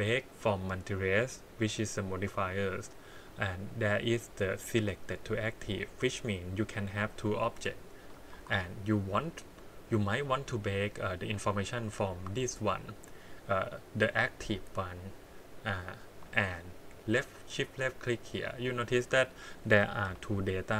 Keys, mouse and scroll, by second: 4.2 click, 5.9 click, 7.2 click, 7.5 scroll down 2, 8.3 shift+d, 12.0 click, 12.3 click, 17.6 shift+click, 20.1 t.